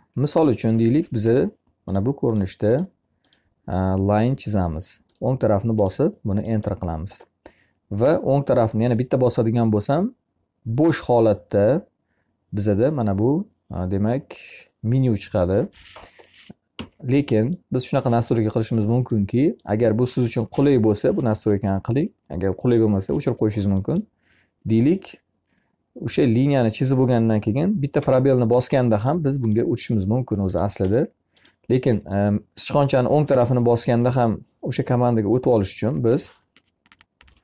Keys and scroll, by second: 0.3 l, 16.2 Escape, 27.4 space, 36.5 o.